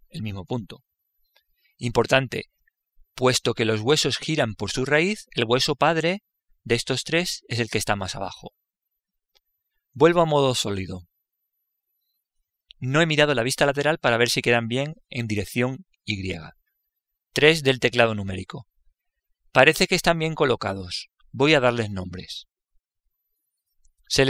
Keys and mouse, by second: 3.0-6.0 right drag, 11.9 z, 18.4 KP_3.